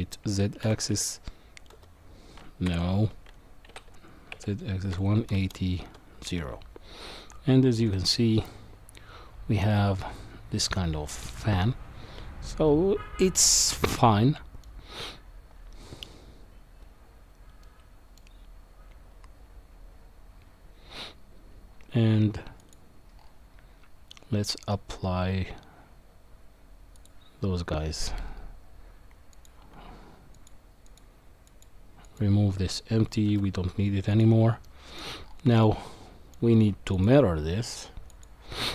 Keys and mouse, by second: 3.7 r, 7.9-14.6 middle drag, 17.7-18.2 middle drag, 22.6 click, 30.3 click, 30.9 click, 31.5 click, 32.1 click, 33.3 Delete, 34.6-35.0 middle drag, 35.6-36.3 middle drag, 37.0-38.2 drag.